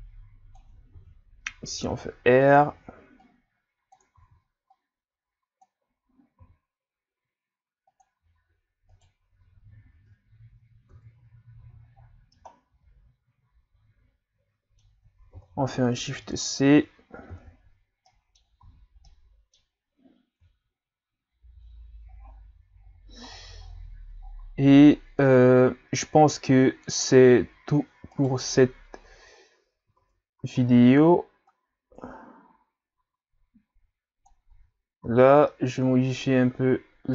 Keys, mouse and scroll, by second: 1.0 r, 3.2 click, 4.3 ctrl+z, 4.7-6.4 drag, 6.4 r, 8.9 right click, 10.3 Tab, 10.9 Tab, 11.6 a, 11.9-12.3 scroll down 6, 12.3 scroll up 1, 12.5-15.3 middle drag, 15.3 shift+c, 15.9 a, 17.3 shift+c, 18.1 middle click, 18.6 a, 19.1-20.4 middle drag, 20.4 KP_3, 22.2-22.8 scroll up 4, 22.8 scroll down 4, 23.4 scroll down 1, 23.7-24.2 scroll up 2, 24.3-25.0 scroll up 9, 28.2 right click, 30.0 Tab, 30.4 a, 30.6 a, 31.5-34.6 drag, 34.6 Tab, 35.1 a, 35.3 scroll down 1, 35.5-37.1 middle drag.